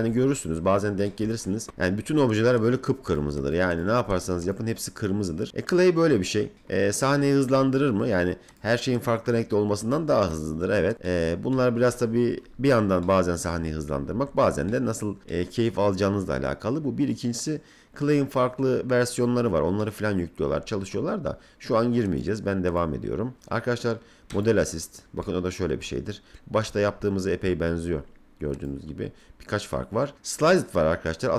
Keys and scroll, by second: 13.6 F3.